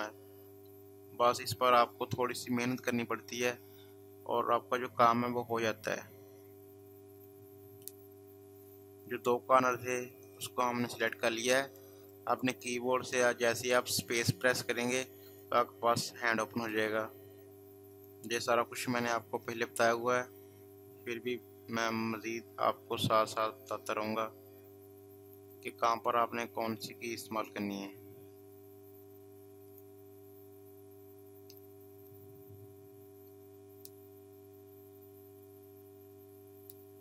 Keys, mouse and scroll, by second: 2.4 click, 5.4 click, 9.2 space, 9.3 click, 9.7 space, 10.8 click, 11.5 click, 12.6 space, 12.7 click, 17.9 click, 22.8 click, 22.9 click, 25.3 click, 29.7 click.